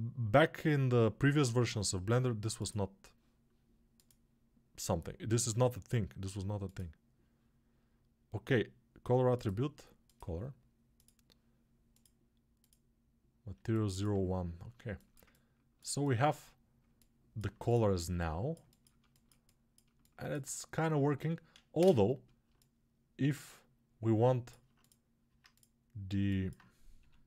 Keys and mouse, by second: 15.7-18.0 alt+shift+drag, 15.7-27.2 alt+shift+right drag.